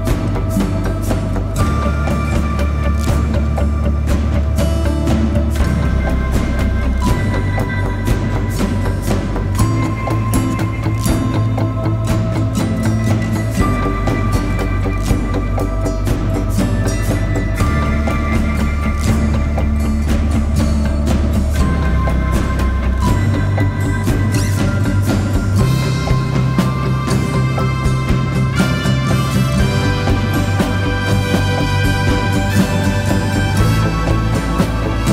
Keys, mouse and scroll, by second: 14.8 ctrl+click.